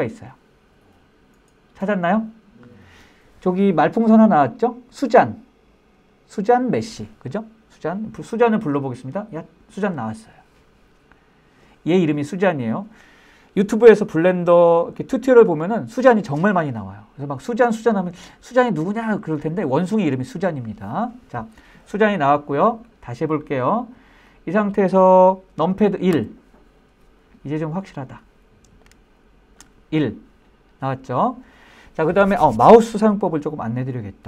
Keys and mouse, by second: 24.3 click, 26.1 KP_1, 28.8-29.6 shift+middle drag.